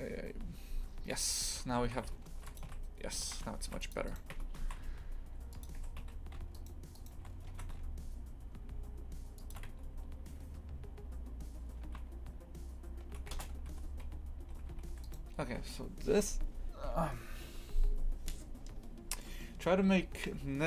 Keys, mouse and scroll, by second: 0.0 click, 1.8 shift+f, 2.6 a, 3.2 shift+f, 4.1 right click, 4.3 Tab, 4.6 shift+f, 5.8 2, 6.0 a, 6.5 alt+shift+right click, 6.9 alt+shift+right click, 7.5 ctrl+b, 9.6 Tab, 13.7 ctrl+z, 14.0 ctrl+z, 14.9 3, 15.0 right click.